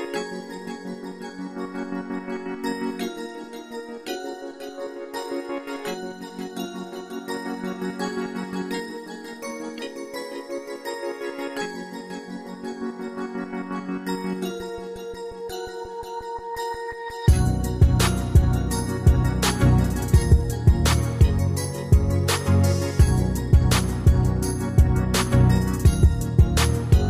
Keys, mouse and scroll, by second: 12.2 alt+Tab, 13.4 alt+click, 25.0 alt+Tab.